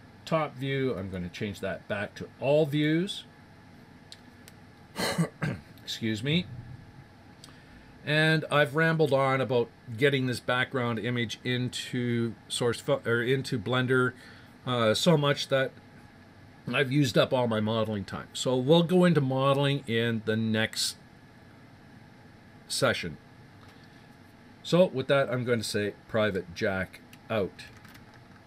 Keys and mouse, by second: 7.3-9.4 middle drag.